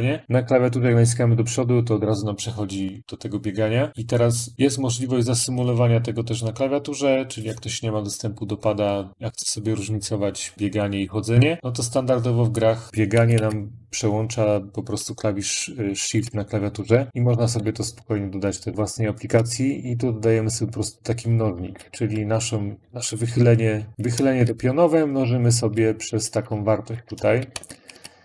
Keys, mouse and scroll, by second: 0.8-1.1 Up, 3.9 Up, 3.9 click, 6.9 Up, 6.9 click, 12.4 click, 12.9 Left, 13.1 Left, 15.6 Left, 15.8 Left, 16.0 Left, 16.0 click, 16.7-17.8 Delete, 18.5 End, 18.6 Left, 18.7 Left, 18.7 Right, 22.8-23.6 Left, 24.3 Right, 24.8 Right, 26.1 Left, 26.7 Left, 27.2 End, 27.5 Left.